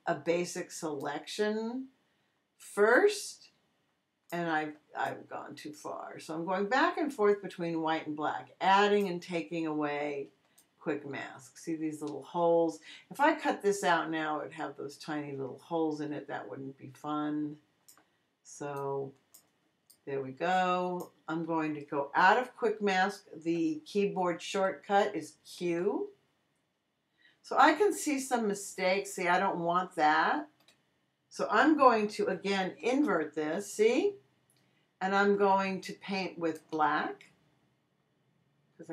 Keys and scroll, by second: 4.5 x, 10.3 x, 25.6 q, 30.4 q, 32.8 super+i.